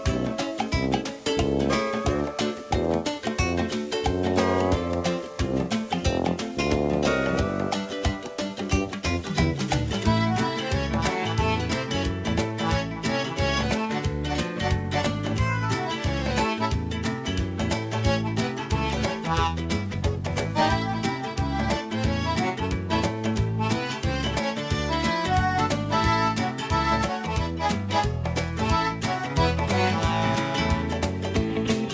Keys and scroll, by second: 4.0 KP_Add, 4.2 Return, 5.1 KP_Add, 5.2 KP_8, 5.4 Return, 10.6 x, 13.0 x.